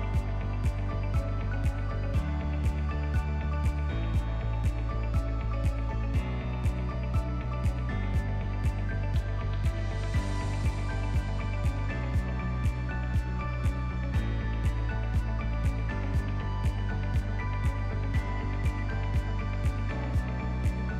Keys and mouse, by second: 1.5-1.9 drag, 4.0 click, 6.1 middle click, 6.5-11.7 drag, 13.2-13.8 middle drag, 14.1 click, 16.4 middle click, 17.1 middle click, 17.7 middle click, 18.6 middle click, 19.2 middle click.